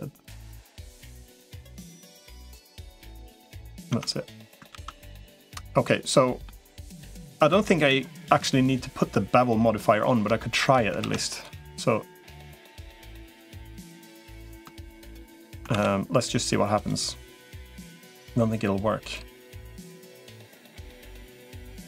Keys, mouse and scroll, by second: 0.9 click, 1.6 middle click, 2.5 click, 2.5 2, 3.3 middle click, 3.7 Tab, 4.5 ctrl+s, 5.0-6.3 middle drag, 10.2 shift+middle click, 10.9 ctrl+s, 12.5-14.5 middle drag, 14.7 shift+middle click, 15.5 ctrl+s, 16.7 click, 17.7-19.5 drag, 21.3 middle click.